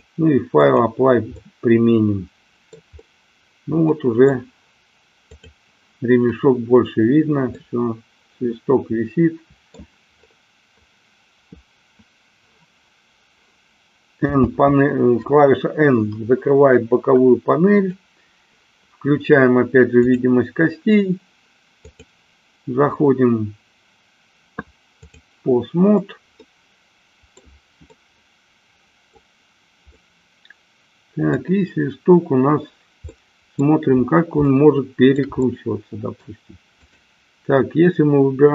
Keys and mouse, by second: 1.5-2.7 middle drag, 4.0-4.5 middle drag, 7.6-9.7 middle drag, 14.1 n, 17.7 click, 19.9 click, 21.9-25.2 drag, 26.4-27.5 middle drag, 28.0-29.4 middle drag, 30.0-31.5 middle drag, 33.0-33.7 middle drag, 34.6-35.2 shift+middle drag, 35.5-36.4 middle drag, 36.9 click.